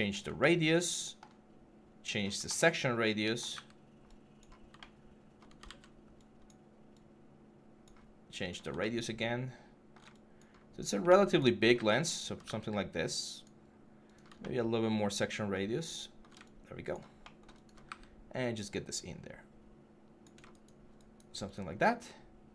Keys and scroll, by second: 3.3 w, 5.5 ctrl+z, 12.2 w, 17.7 w.